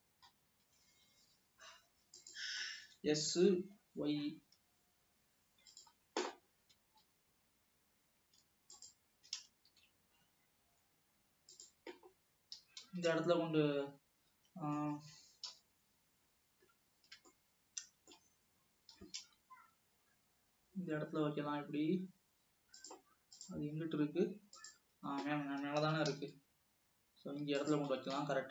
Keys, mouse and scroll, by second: 0.4 scroll down 1, 0.9 s, 2.8 scroll down 2, 3.0 s, 6.7 s, 9.3 s, 12.7 g, 15.6 KP_1, 17.0-17.3 scroll up 3, 17.5-18.6 shift+middle drag, 18.6 shift+scroll up 1, 19.1 g, 26.1 g.